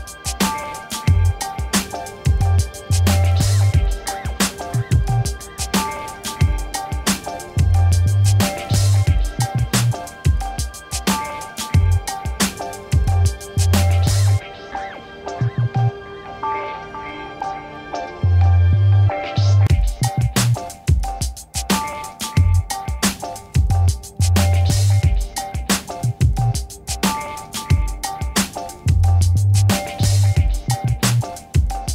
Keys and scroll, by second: 10.3 ctrl+t, 14.5 Return.